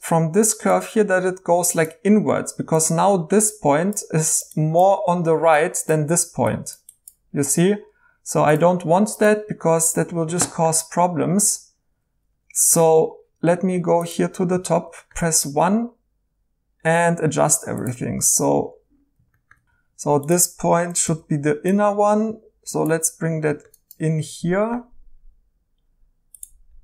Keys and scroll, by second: 10.1 Escape, 14.5 1, 19.6 ctrl+z, 21.1 g.